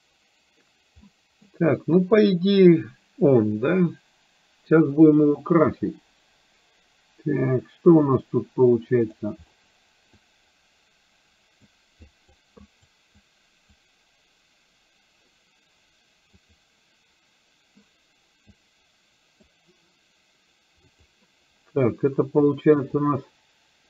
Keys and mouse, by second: 1.0 middle click, 10.2-11.7 drag, 12.1 click, 12.6 click, 13.2 click, 16.4 click, 18.5-19.5 drag, 21.0 click, 23.0-23.8 drag.